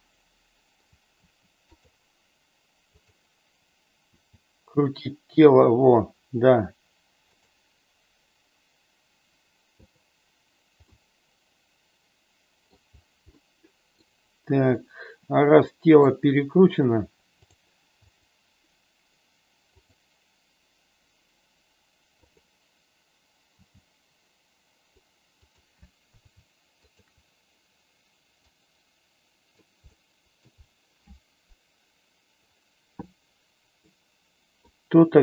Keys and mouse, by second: 1.2 r, 1.7 click, 2.9 click, 4.1 r, 9.8 click, 10.8-12.7 middle drag, 13.3 middle click, 14.7-15.9 middle drag, 17.3-18.6 drag, 19.7 click, 22.1 click, 23.6 g, 25.3 click, 26.9 shift+click, 28.4-29.6 drag, 29.8 middle click, 33.7 middle click.